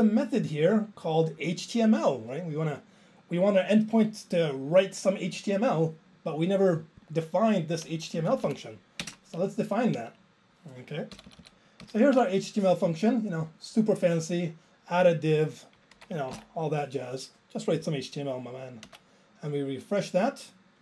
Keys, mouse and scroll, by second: 7.1 click, 8.2 Up, 8.4 Up, 9.1 alt+space, 11.2 ctrl+k, 11.3 ctrl+k, 11.4 ctrl+k, 11.8 ctrl+k, 13.4 click, 13.5 click, 15.1 click, 15.1 click, 16.9 ctrl+j.